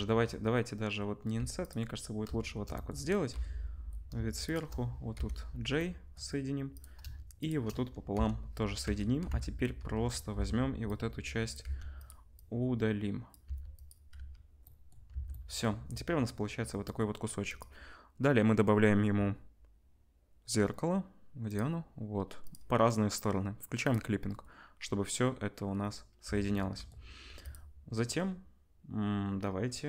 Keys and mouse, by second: 1.3 1, 1.6 middle click, 2.2-7.3 shift+drag, 3.3 KP_7, 4.5 shift+middle click, 4.5 shift+right click, 5.1 j, 7.3 middle click, 7.4-11.0 drag, 8.1-10.3 typing, 11.0-22.5 middle drag, 11.6 x, 13.4 x, 14.1 z, 14.2 click, 14.2 right click, 15.1 Tab, 22.5-23.8 drag, 23.8 middle click, 23.9-29.8 drag, 26.2 Tab, 27.2 1.